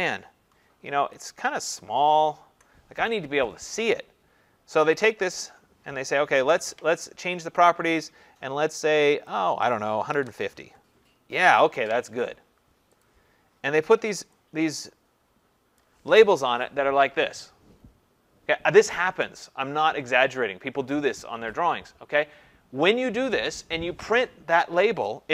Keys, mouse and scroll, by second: 1.0 ctrl+-, 1.6 ctrl+0, 5.0 click, 5.2 click, 6.5 ctrl+a, 7.6 click, 9.7 click, 9.9-10.8 typing, 13.0 click, 15.8 click.